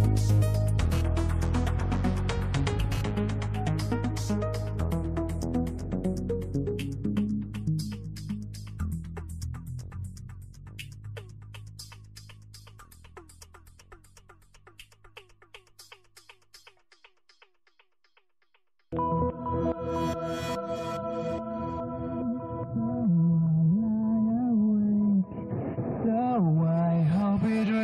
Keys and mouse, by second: 1.4 middle click, 2.5 middle click, 3.9-8.0 drag, 9.6 click, 13.6 click, 15.8 click, 17.6 click, 20.3 click, 23.9-26.8 drag.